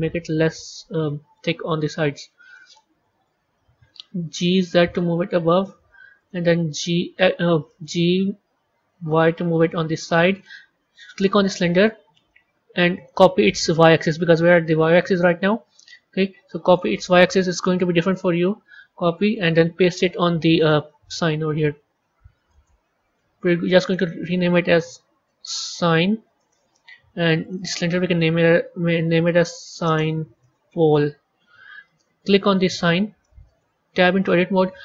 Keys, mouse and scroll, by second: 1.6-3.2 middle drag, 3.2 KP_3, 4.4 g, 6.6 g, 8.7 g, 11.2 click, 12.9 click, 16.6-19.3 drag, 20.5-23.6 drag, 23.7 click, 23.9-27.0 drag, 27.3 click, 27.5-30.7 drag, 32.4 click, 33.1-34.1 middle drag, 34.1 Tab.